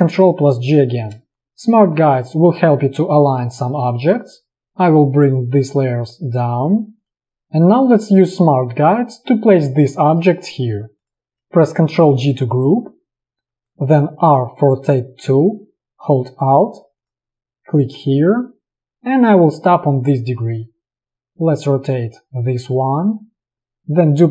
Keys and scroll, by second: 0.7 ctrl+g, 5.7 ctrl+[, 11.3 space, 12.2 ctrl+g, 13.5 space, 14.3 r.